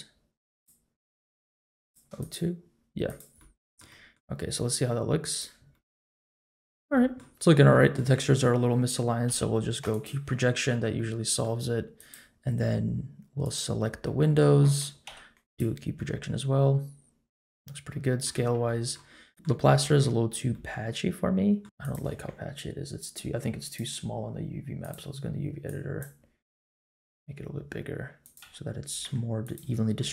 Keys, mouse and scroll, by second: 0.5-1.9 drag, 2.2 click, 3.0 click, 3.4-3.8 middle drag, 3.9 middle click, 5.4 click, 5.7-6.5 middle drag, 6.7 scroll up 2, 6.9 middle click, 7.5 scroll down 1, 7.7 middle drag, 8.1 Tab, 9.2 u, 10.7 Tab, 10.9 middle click, 11.6 Tab, 11.9 click, 13.4 click, 14.0 middle click, 15.0 u, 15.9-17.5 middle drag, 17.9 middle click, 18.3 Tab, 18.6 middle click, 19.3 click, 19.3 middle click, 19.7 middle drag, 20.2 scroll down 1, 20.5-21.6 middle drag, 21.6 Tab, 21.6 scroll up 2, 21.8 click, 23.6-24.9 drag, 25.6 click, 26.7 s, 28.4 g, 29.6 Tab, 30.0-30.1 middle drag.